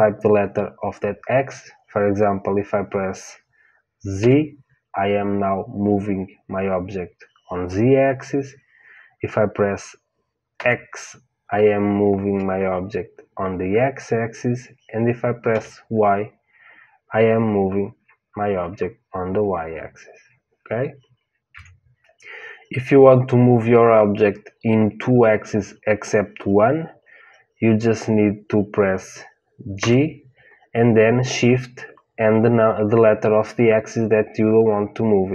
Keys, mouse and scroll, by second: 29.7 g.